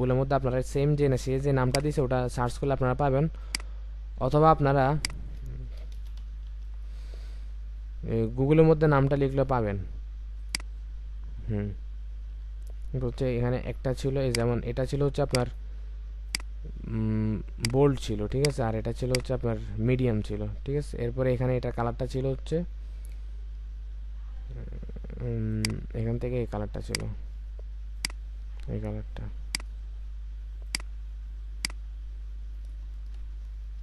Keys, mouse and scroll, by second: 5.8-6.5 typing, 23.2-23.8 alt+scroll down 1, 32.8 ctrl+space.